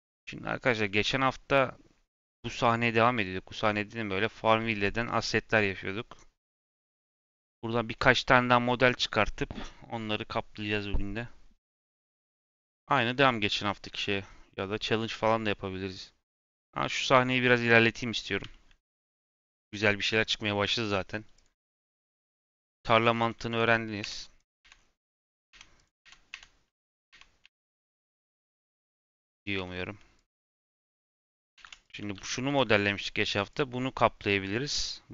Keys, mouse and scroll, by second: 0.0 click, 17.6-18.4 scroll up 2, 18.4-20.4 shift+middle drag, 20.4-21.0 scroll up 6, 21.3 click, 21.6 Tab, 21.9 Tab, 22.4 scroll down 5, 23.1 click, 23.4 Tab, 24.0 Tab, 24.3 click, 24.6 Tab, 24.7 scroll up 6, 25.4 Tab, 25.7 click, 26.3 Tab, 26.8 click, 27.3 Tab, 27.5 Tab, 28.0-28.5 scroll down 3, 28.5 click, 28.9 g, 29.5 Tab, 29.8 Tab, 30.1 click, 30.6 scroll down 4, 31.0-31.5 scroll up 5, 31.5 ctrl+s, 31.8 click, 32.1 g, 32.7-33.0 scroll down 4, 33.0 shift+middle click, 33.3 scroll up 1, 33.4 click.